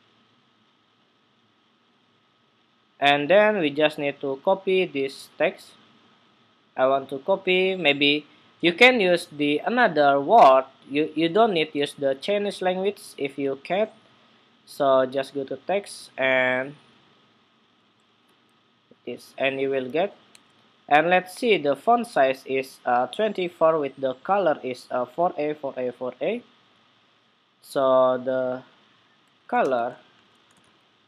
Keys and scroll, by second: 11.1 super+a, 11.5 super+c, 17.8 super+v, 20.0 super+Tab.